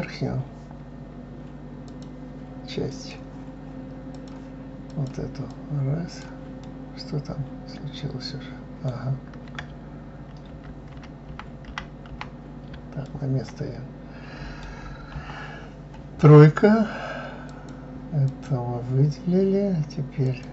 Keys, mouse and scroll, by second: 1.8 click, 2.8 click, 4.1 click, 4.8 click, 5.5 click, 6.6-9.6 middle drag, 10.9 ctrl+z, 13.0-15.1 middle drag, 15.1 KP_3, 17.5-18.8 drag, 20.2 click.